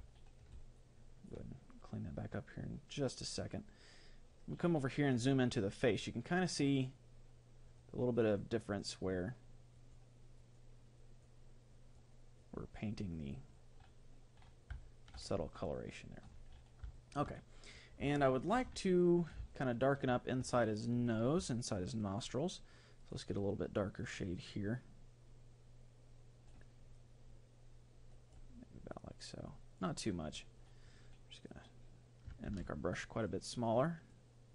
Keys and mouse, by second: 3.8-7.6 middle drag, 7.8-15.2 drag, 15.2-21.2 middle drag, 22.0-28.8 drag, 28.9-30.8 drag, 31.5-34.5 drag, 32.6 ctrl+z.